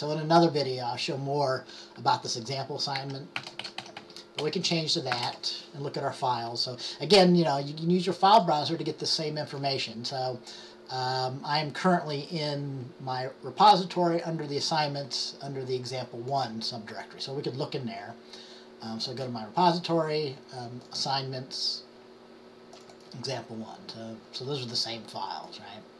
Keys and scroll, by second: 2.9-5.8 typing.